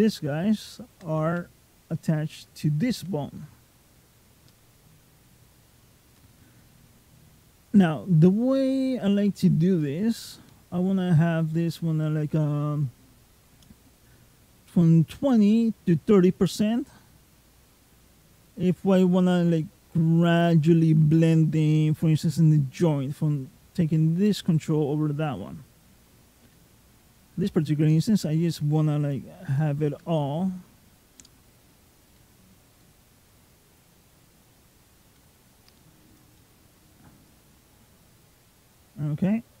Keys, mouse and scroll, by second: 1.7 ctrl+click, 2.4 middle click, 4.3 click, 9.7 click, 17.2 click, 26.6 click, 27.7 click, 29.2-29.6 scroll up 5, 30.0 shift+middle click, 30.8 click, 36.2 middle click, 37.1 click.